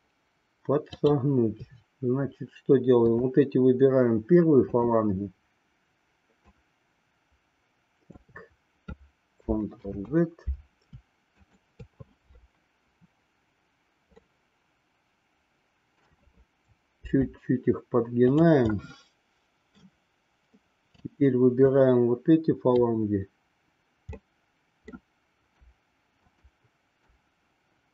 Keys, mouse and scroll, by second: 0.9-2.2 drag, 3.1-4.2 shift+drag, 4.6-6.0 shift+drag, 6.5-8.2 shift+drag, 9.7 ctrl+z, 11.2-12.7 shift+drag, 14.2-16.1 middle drag, 17.0 r, 18.7-19.9 middle drag, 21.7-22.9 drag, 24.1 middle click, 26.3-27.6 shift+drag.